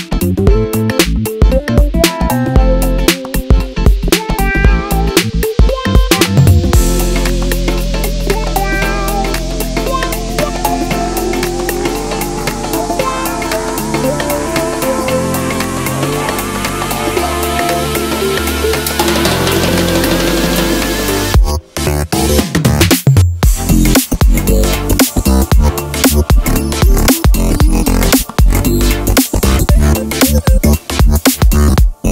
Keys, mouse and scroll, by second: 0.2 click, 0.4 Tab, 1.5 click, 2.5 Tab, 3.0 ctrl+r, 3.7 Escape, 3.8-10.1 middle drag, 4.0 ctrl+r, 4.4 Escape, 4.8 ctrl+e, 5.1 Escape, 5.3 ctrl+r, 6.0 Escape, 7.5 ctrl+r, 7.9 Escape, 8.5 a, 9.1 i, 10.1 click, 10.4 ctrl+shift+i, 10.9 3, 12.3 x, 13.8 ctrl+b, 16.6 click, 16.7 Tab, 16.8-19.4 middle drag, 17.2 Tab, 17.8 alt+e, 19.4 click, 19.7 ctrl+z, 19.9 Tab, 20.2-23.0 drag, 22.3 KP_Enter, 22.8 scroll down 2, 23.0 middle click, 23.2 drag, 23.5 drag, 23.7-27.0 middle drag, 24.3-26.0 scroll up 2, 27.0 click, 27.1 Tab, 27.3 middle click, 27.5 3, 27.7 alt+click, 27.9 scroll down 1, 28.1 alt+e, 29.7 click, 29.7 scroll down 1, 29.9-32.1 middle drag, 30.6 Tab.